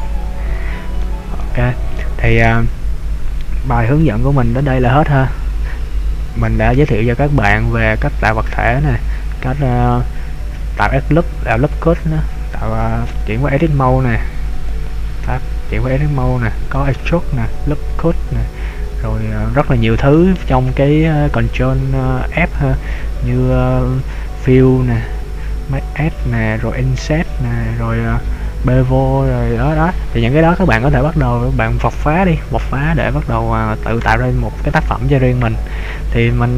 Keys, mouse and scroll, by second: 0.4 middle click, 1.5 middle click, 11.9-13.2 scroll down 3, 13.2 Tab, 14.6 click, 15.4 Tab, 19.2-19.7 scroll down 2, 20.0-22.5 scroll down 2, 22.5 ctrl+f.